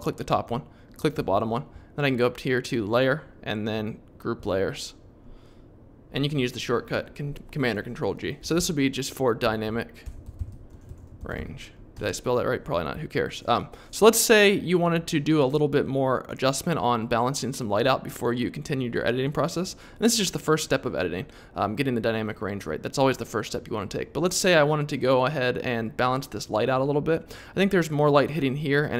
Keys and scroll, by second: 8.1-11.8 typing, 11.9 Return.